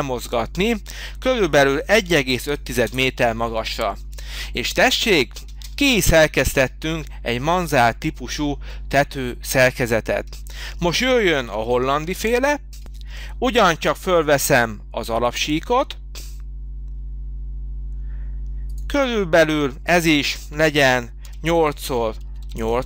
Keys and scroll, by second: 1.3-2.8 typing, 2.9 Return, 5.5 space, 11.5 h, 21.2 8, 21.8 ctrl+alt+,, 22.4 8.